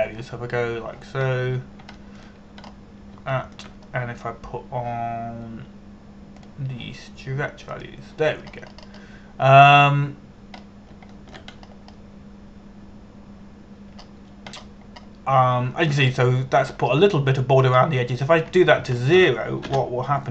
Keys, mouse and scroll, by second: 0.0 shift+middle click, 0.4 shift+middle click, 0.9 shift+middle click, 1.7 Tab, 2.9-3.5 scroll down 1, 3.6 shift+middle click, 4.3-4.8 scroll up 1, 5.0 shift+middle click, 8.0 click, 10.1-12.3 scroll up 1, 12.3 scroll down 1, 12.8 shift+middle click, 13.2-15.5 scroll up 2, 15.5-16.9 scroll down 1, 17.6-20.3 scroll up 1.